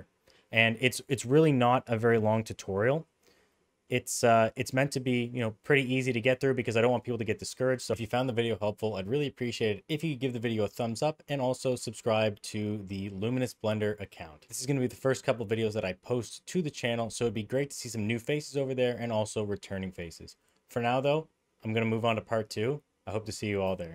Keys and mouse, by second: 1.4-2.2 middle drag, 3.5-3.9 middle drag, 4.2 middle click.